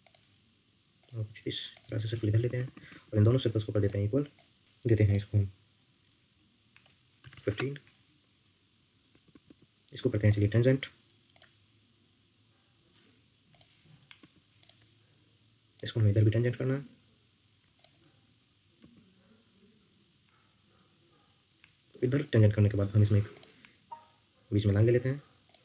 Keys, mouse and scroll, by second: 2.4 Escape, 2.6 Escape, 2.8 Escape, 2.9 Escape, 7.0-7.8 typing, 9.1 Escape, 9.3 Escape, 9.4 Escape, 10.0 Escape, 11.3 shift+click, 14.2 Escape, 15.7 shift+click, 18.8 Escape.